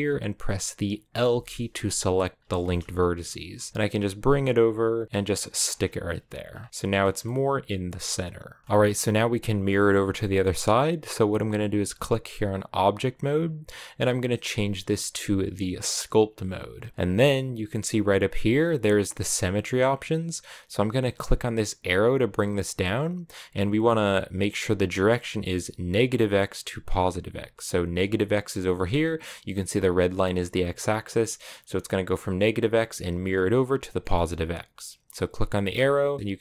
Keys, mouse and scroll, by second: 1.1 l, 2.3 shift+middle click, 2.6-3.4 scroll up 1, 3.4 g, 5.5-6.3 scroll down 5, 6.3-6.7 scroll up 1, 6.7 middle click, 6.8 scroll down 3, 7.1-15.8 middle drag, 15.8-27.1 drag, 27.1-28.0 scroll down 1, 28.0-34.0 middle drag, 34.0-36.3 scroll up 1.